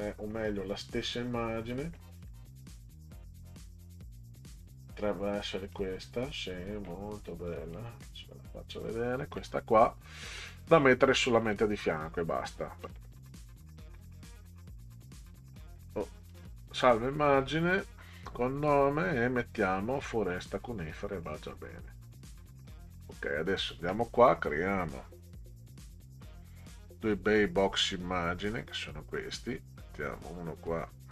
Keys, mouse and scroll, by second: 1.7 click, 4.5 click, 5.6 right click, 7.5 click, 8.7 click, 10.7 right click, 11.4 click, 11.9 right click, 13.5 right click, 14.8 click, 15.3 right click, 15.7 click, 16.3 right click, 17.1 click, 21.0 click, 22.8 click, 28.5 click, 30.2-31.1 drag.